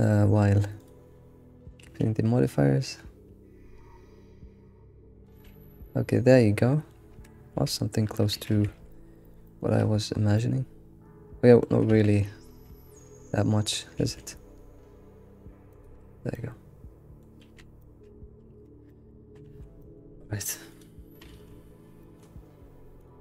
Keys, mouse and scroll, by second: 0.8 click, 1.8 alt+s, 5.4 alt+shift+z, 5.6 scroll down 2, 5.8-7.1 middle drag, 7.0 alt+shift+z, 7.1 Tab, 7.4 scroll down 3, 7.6 alt+q, 8.4 alt+q, 8.7 alt+shift+z, 8.9-9.3 middle drag, 9.5 alt+middle click, 10.2 scroll up 7, 10.4-11.9 middle drag, 11.9 ctrl+z, 12.7 ctrl+z, 13.1 ctrl+z, 14.0 alt+s, 14.2 alt+s, 16.1 scroll down 2, 16.3-17.4 middle drag, 17.4 alt+shift+z, 17.6 scroll down 3, 17.8-18.5 middle drag, 18.5 Tab, 18.7 Tab, 18.8 scroll down 3, 18.9-19.5 middle drag, 19.5 alt+shift+z, 19.8 middle click, 20.8 click, 22.1-23.1 middle drag, 23.1 click.